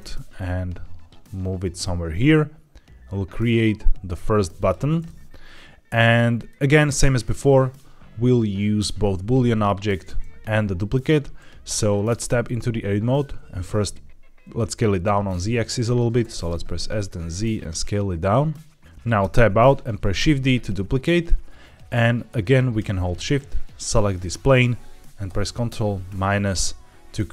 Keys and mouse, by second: 4.4 click, 4.9-5.8 middle drag, 6.3 middle click, 12.0 Tab, 16.1 s, 16.3 z, 19.1 Tab, 20.1 shift+d, 20.9 right click, 23.2 shift+click, 25.6 ctrl+KP_Subtract.